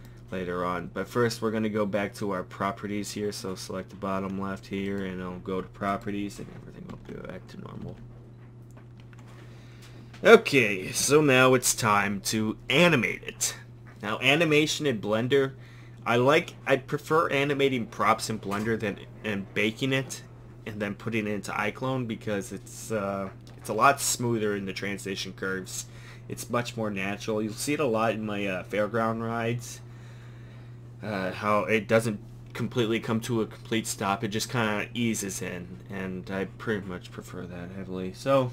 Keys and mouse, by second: 0.0-4.9 drag, 6.9 Tab, 7.8 a.